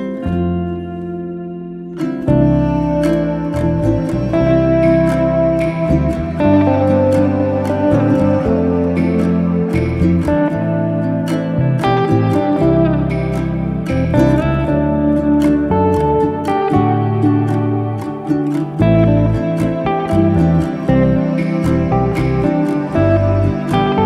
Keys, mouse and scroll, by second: 1.4 r, 5.6 r, 8.9 middle click, 13.1-15.1 right drag, 15.1 click, 15.6 click, 16.1 click, 18.0 shift+s, 19.3 shift+d, 20.0 r.